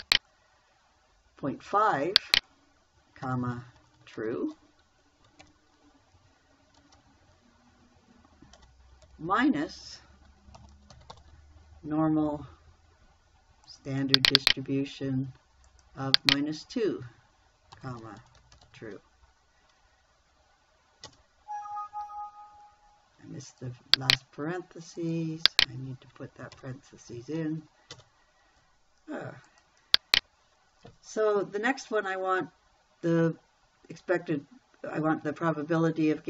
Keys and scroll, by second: 3.7-4.7 typing, 5.9 shift+0, 7.2 space, 9.0 BackSpace, 9.5 -, 11.0 n, 11.2 o, 11.4 r, 11.5 m, 18.2-19.1 typing, 21.5 Return, 27.0 shift+0, 28.4 Return.